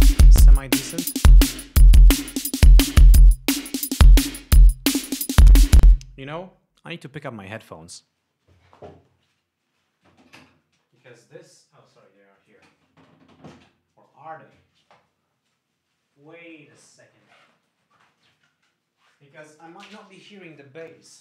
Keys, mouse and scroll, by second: 1.2 click, 5.0 click, 6.2 space.